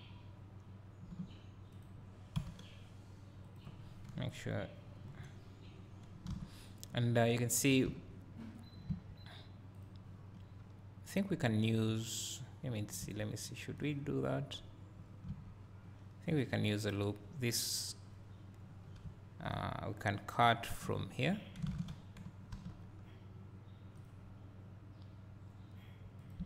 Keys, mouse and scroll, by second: 1.9 right click, 2.5 g, 4.1 KP_3, 5.0 KP_1, 5.9-6.3 scroll down 2, 6.3 alt+a, 6.5-8.0 scroll up 1, 9.7 z, 9.9 click, 13.9 click, 16.4 click, 18.0-18.5 scroll up 1, 18.5-20.5 scroll down 1, 21.7 alt+a, 22.5 k.